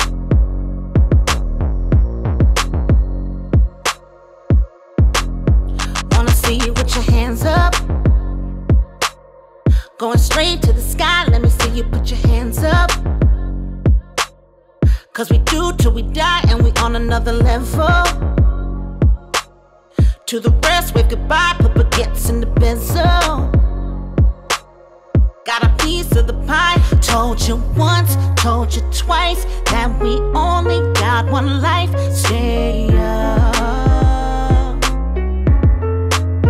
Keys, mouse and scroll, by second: 0.1-1.1 drag, 3.6-4.3 typing, 9.9-12.5 drag, 14.1-15.1 typing, 16.5 scroll down 1, 17.3-18.2 drag, 21.8-22.4 drag, 24.2-24.5 drag, 24.6 space, 28.0-28.6 click, 28.6 space, 30.6 space, 31.3-32.5 drag, 33.1 right click, 33.9 click, 36.0 right click.